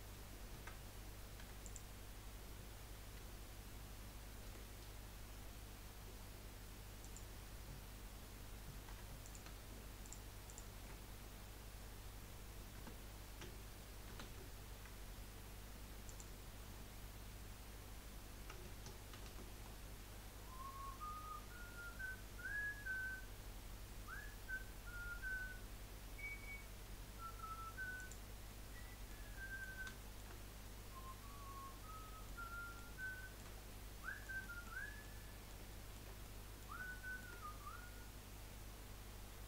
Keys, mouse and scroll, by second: 1.4 3, 1.6 click, 3.2 2, 4.4 Delete, 8.9 3, 9.2 click, 10.0 alt+shift+click, 10.5 alt+shift+click, 12.8 Tab, 14.1 ctrl+a, 16.9 Tab, 19.4 ctrl+b, 28.5-33.6 middle drag, 33.6-34.1 scroll up 3, 34.1-39.2 shift+middle drag, 39.2-39.4 scroll down 4.